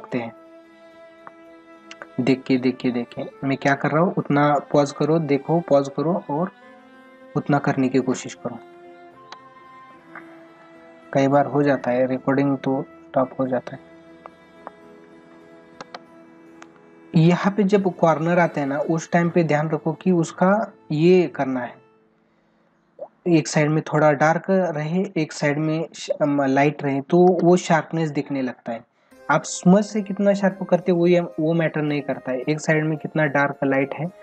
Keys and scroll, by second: 8.6 space, 15.8 ctrl+alt+z, 17.3 ctrl+alt+z, 17.9 ctrl+=.